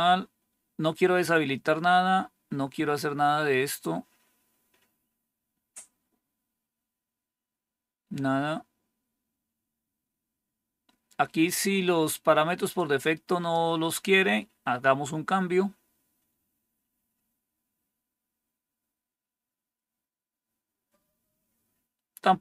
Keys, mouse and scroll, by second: 1.2-2.6 scroll down 3, 2.6-5.6 scroll down 1, 5.6 scroll down 1, 6.5-7.2 scroll down 2, 7.2-12.6 scroll down 1, 12.6 click, 15.1 scroll down 1, 22.1 scroll down 1.